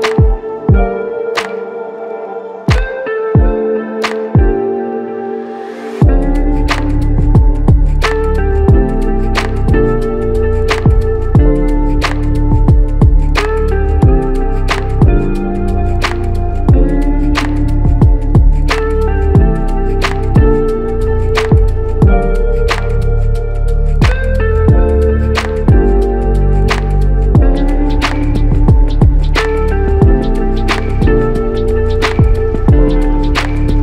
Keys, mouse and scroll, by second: 21.7 f, 22.8 double click.